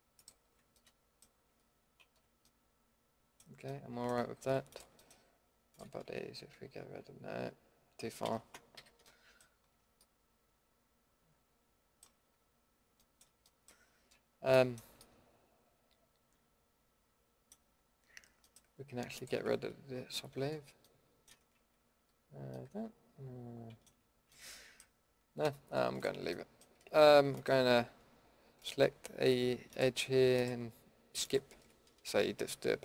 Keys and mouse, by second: 0.7-2.0 middle drag, 2.0 ctrl+x, 2.5 middle click, 3.8 middle click, 4.7 drag, 5.0 middle click, 6.5 ctrl+x, 8.2 ctrl+z, 8.7 a, 9.7 Tab, 10.1 middle click, 10.9 middle click, 12.2 Tab, 15.0 middle click, 19.1-20.3 middle drag, 20.3 ctrl+x, 21.6 ctrl+z, 25.4 a, 25.9-26.5 middle drag.